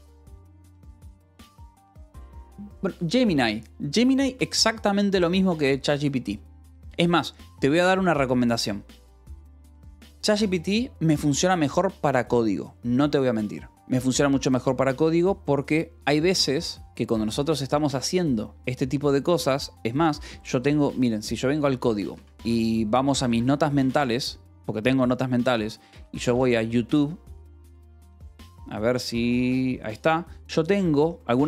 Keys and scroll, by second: 22.0-24.3 typing, 23.1 Escape, 25.5-26.8 typing, 29.2 BackSpace.